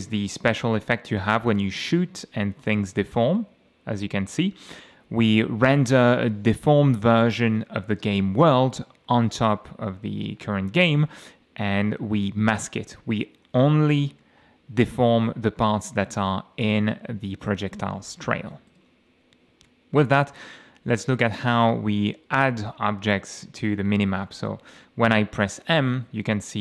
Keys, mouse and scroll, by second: 0.4 F6, 1.8 space, 2.1 d, 3.3 a, 4.5 d, 8.1 space, 8.5 a, 9.7 a, 10.2 d, 13.1 a, 13.7 space, 14.2 a, 14.9 d, 15.9 d, 16.9 a, 18.7 F8, 23.3 F6, 24.7 m.